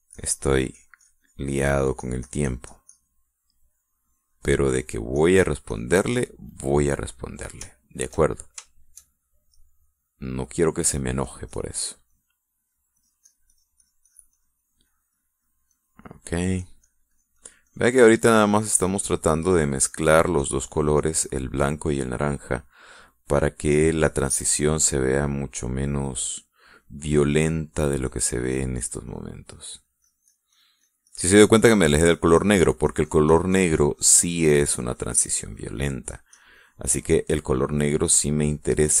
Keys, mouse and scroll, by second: 0.2-4.0 drag, 5.1 click, 5.6-7.1 drag, 7.9 middle click, 8.5 shift+middle click, 9.5 shift+middle click, 10.0 shift+middle click, 10.7 shift+click, 11.2-12.6 drag, 12.9 click, 13.4 click, 17.4-22.3 drag, 22.7 middle click, 23.7 middle click, 24.2 middle click, 25.0 click, 25.8 click, 26.5 click, 27.1 click, 28.2 click, 28.6-36.8 drag, 36.9 click, 38.4 click.